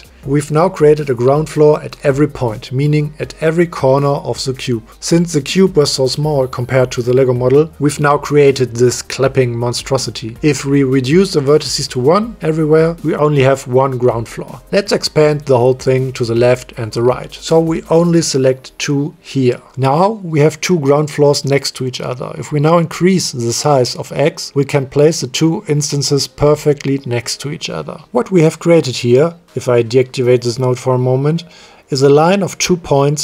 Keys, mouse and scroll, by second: 0.9-1.4 middle drag, 3.5-4.5 drag, 7.5 middle click, 12.5-13.5 drag, 14.5-15.0 middle drag, 15.0-15.6 drag, 15.0-15.6 right drag, 17.7 click, 20.8-27.1 drag, 28.1-29.1 middle drag, 29.4 m, 29.7 m.